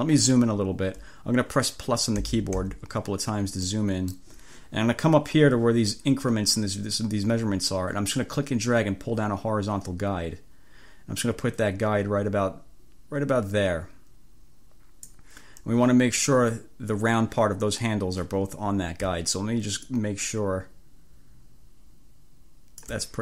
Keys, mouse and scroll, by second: 2.3 =, 3.7 click, 8.3-15.3 drag, 19.9-23.1 drag.